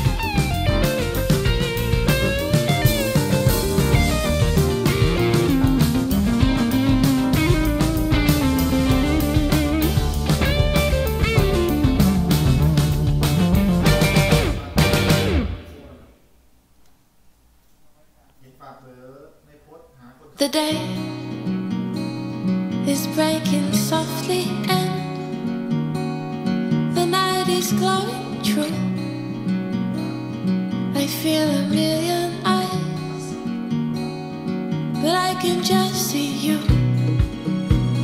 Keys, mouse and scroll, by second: 1.1-11.6 drag, 11.6-13.4 scroll up 1, 13.4-14.0 scroll down 1, 14.0-15.7 scroll up 2, 15.7-16.9 scroll down 1, 16.9 h, 18.9-24.4 drag, 24.4-26.2 scroll down 2, 26.2-29.4 scroll up 8, 29.4-31.1 scroll down 7, 31.1 click, 31.7-33.3 middle drag, 33.3-38.0 drag.